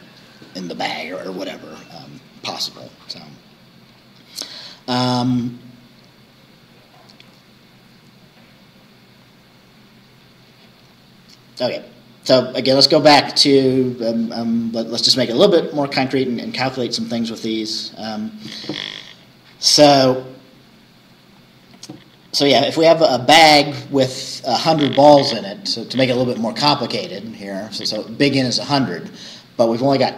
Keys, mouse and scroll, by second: 3.5-3.9 scroll down 2, 5.8-6.2 scroll down 2.